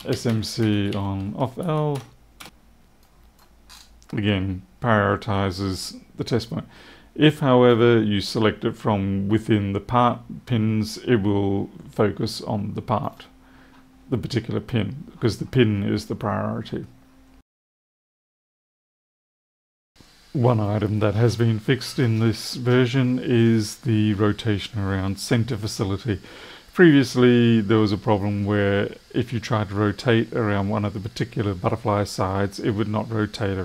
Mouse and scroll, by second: 2.9 click, 3.6 scroll up 1, 7.2 click, 12.9 click.